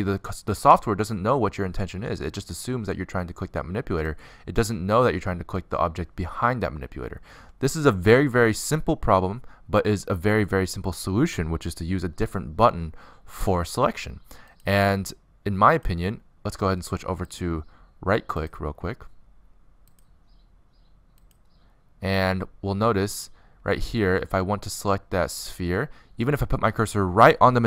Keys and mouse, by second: 1.9 click, 2.7 click, 3.3-5.5 middle drag, 7.3 middle click, 7.4-13.3 drag, 13.3 middle click, 13.4 click, 14.3 middle click, 14.6 click, 15.2 middle click, 17.2-20.7 drag, 20.7 middle click, 23.6-25.5 drag, 24.3-26.9 middle drag, 24.3-25.5 right drag, 27.4-27.6 middle drag.